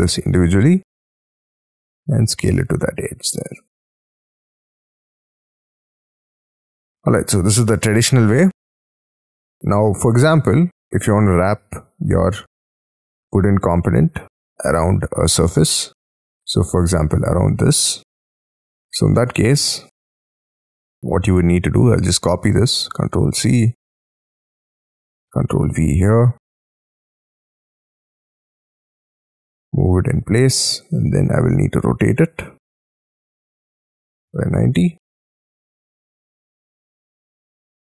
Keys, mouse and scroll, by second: 2.5 middle click, 3.6 space, 3.6 scroll down 6, 3.9 Escape, 4.4 middle click, 4.7 scroll down 6, 6.0-6.9 scroll down 18, 9.5-10.7 scroll down 23, 11.0 middle click, 12.6-13.2 scroll up 11, 13.2-14.0 scroll down 18, 14.4 shift+middle click, 15.4 middle click, 17.8-18.2 scroll up 7, 18.2 scroll down 1, 18.6 scroll up 6, 19.3 shift+middle click, 20.0-21.3 scroll up 8, 21.3-21.8 scroll up 6, 22.0 ctrl+c, 22.9 ctrl+c, 23.2-24.2 ctrl+scroll down 22, 24.3 shift+middle click, 24.8-25.1 scroll up 6, 25.1 ctrl+v, 26.3-27.0 scroll up 15, 27.0 middle click, 27.6-30.3 scroll up 24, 30.3-30.8 scroll down 5, 32.0 Up, 32.8 ctrl+click, 33.2 double click, 34.0-35.7 typing, 35.1-35.6 scroll down 11, 36.0-36.8 scroll up 10.